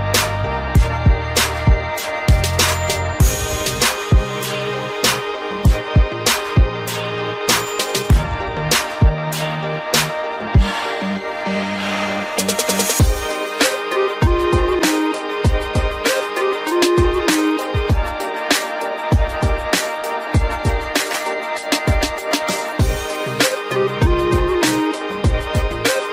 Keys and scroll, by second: 0.2 alt+Delete, 9.7 Left, 11.5 ctrl+t, 14.5 Return, 17.4 ctrl+0, 25.2 ctrl+t.